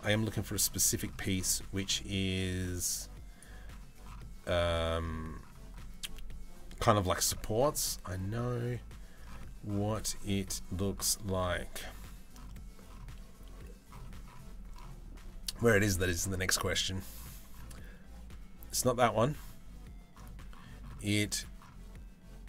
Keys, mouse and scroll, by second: 2.6 click, 2.8 click.